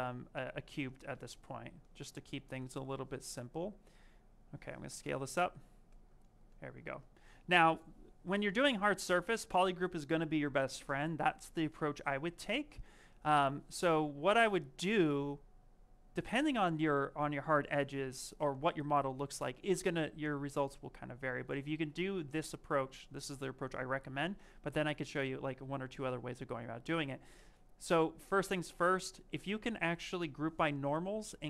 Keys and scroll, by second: 4.8 shift+f.